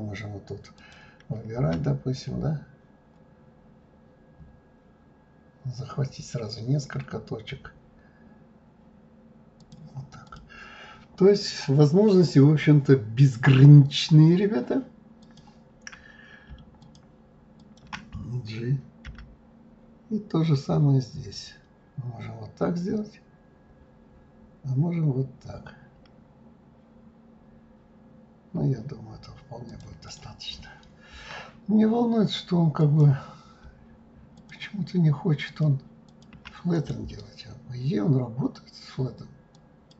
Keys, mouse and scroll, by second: 0.8 click, 1.6 g, 10.2-13.3 drag, 15.2 click, 16.8 shift+click, 17.6 shift+click, 19.0 g, 30.1 click, 30.5-32.5 scroll up 10, 32.7 click, 34.4 shift+click, 35.4 shift+click, 36.1 shift+click, 36.7-39.8 right drag.